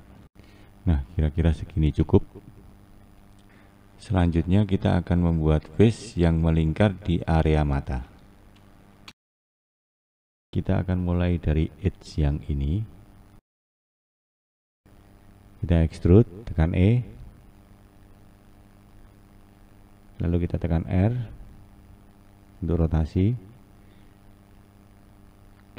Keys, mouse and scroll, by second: 0.0-1.9 scroll down 5, 1.9-7.2 scroll down 6, 7.2-9.0 scroll down 2, 9.0-12.5 scroll up 2, 12.7 2, 13.7 click, 16.2 e, 21.0 r, 23.9 click.